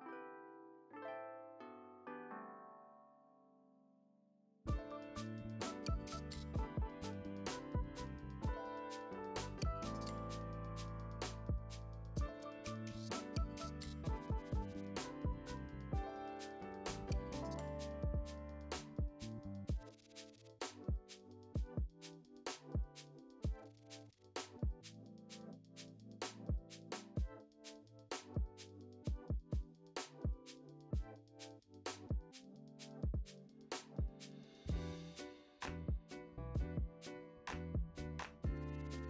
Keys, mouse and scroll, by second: 1.7-2.5 scroll down 1, 2.5 click, 2.7 scroll down 1, 3.2-4.2 shift+right drag, 4.2-10.5 typing, 4.9 click, 5.0 Tab, 5.5 click, 6.0 Tab, 6.5 click, 7.2 click, 7.8 ctrl+a, 8.6 click, 9.1 click, 9.5 click, 10.7 click, 12.3-18.9 drag, 12.3 KP_Decimal, 12.5-12.8 scroll up 4, 12.6 `, 12.8-13.6 scroll down 2, 14.3-14.7 scroll up 2, 14.7-15.4 scroll down 2, 18.5 Tab, 18.9 right click, 18.9 a, 19.7 alt+a, 19.9 click, 20.1 g, 21.5 click, 21.9 g, 22.7 click, 22.9 g, 23.4 Tab, 23.5 alt+a, 23.8 click, 24.1 `, 24.5 g, 25.5 alt+a, 25.6 `, 25.9 scroll down 2, 26.0 `, 26.6 click, 26.7 Tab, 26.8 a, 27.1 KP_3, 28.5-31.9 drag, 29.1-29.7 scroll up 4, 29.3-32.7 typing, 29.9 scroll down 2, 30.5-31.1 scroll up 2, 31.9 Tab, 32.0-32.7 scroll down 3, 32.9 Tab, 33.3 ctrl+m, 34.1 `, 34.3 click, 34.5 g, 34.8 click, 35.2 g, 35.9 Tab, 36.0 scroll down 1, 36.1 alt+a, 36.3 scroll up 1, 36.5 Tab, 36.6 click, 36.9 g, 37.5 click, 37.6 scroll down 1, 37.8 `, 38.2 scroll up 1, 38.3 Tab, 38.5 click, 38.9 ctrl+l.